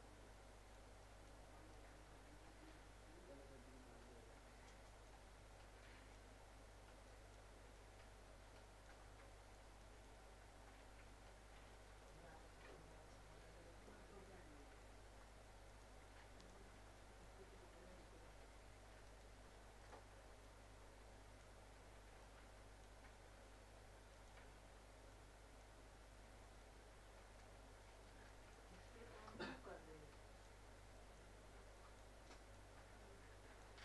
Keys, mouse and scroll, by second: 5.5 scroll up 1, 5.8 click, 9.0 scroll down 1, 9.3 middle click, 9.8 click, 12.3 scroll down 1, 12.9 middle click, 13.6 scroll down 1, 14.2 middle click, 15.7 click, 16.7 scroll down 1, 17.0 middle click, 17.3-17.8 scroll down 1, 18.3-19.1 scroll up 1, 19.1 right click, 19.8 click, 21.6 scroll up 1, 22.2 click, 24.6 scroll up 1, 25.1 click, 26.0 scroll up 1, 26.6 click, 27.6 scroll down 1, 27.8 middle click, 28.3 click, 28.7 middle click, 29.4 click, 30.7 scroll down 1, 31.0 middle click, 31.4-31.8 scroll up 1, 31.8 click.